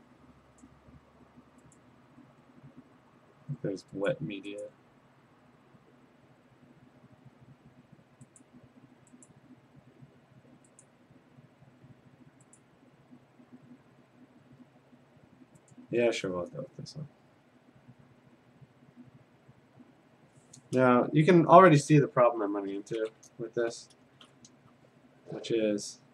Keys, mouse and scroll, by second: 0.6 click, 1.8 click, 2.0-4.1 scroll, 4.1 click, 4.6 click, 5.9-8.4 scroll, 8.4 click, 9.3 click, 9.9 scroll down 5, 10.0 scroll down 2, 10.8 click, 11.5-12.3 scroll down 2, 11.9-12.3 scroll up 1, 12.6 click, 12.8-13.3 scroll down 1, 13.3 scroll down 1, 14.0-14.9 scroll down 6, 15.7 click, 18.0 click, 20.0 click, 21.7 ctrl+z, 21.9 ctrl+z, 23.7 d, 25.7-26.1 scroll.